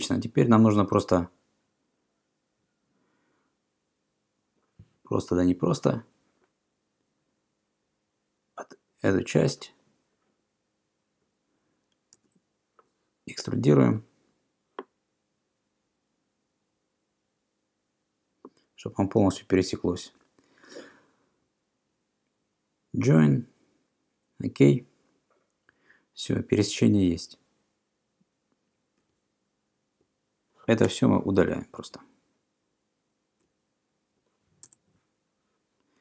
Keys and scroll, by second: 12.2 e, 30.9 BackSpace, 34.7 BackSpace.